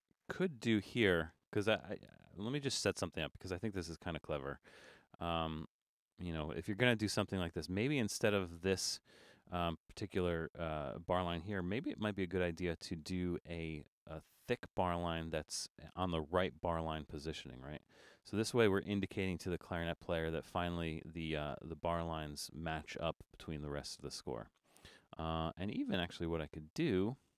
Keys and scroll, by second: 11.7 BackSpace.